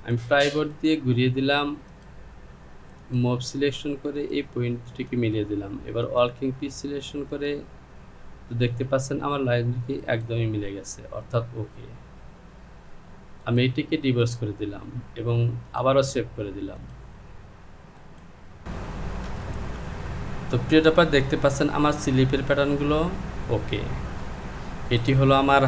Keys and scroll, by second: 19.5 j.